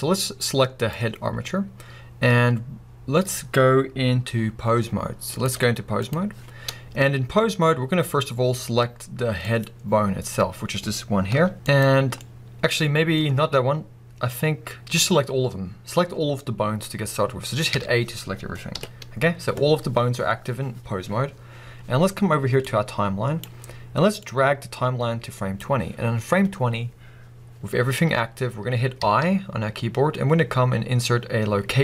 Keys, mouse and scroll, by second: 0.8 click, 5.3-9.6 drag, 6.6-7.7 scroll up 1, 11.3 g, 11.6 click, 12.2-22.6 middle drag, 17.7 a, 18.7 KP_1, 22.6-31.8 drag.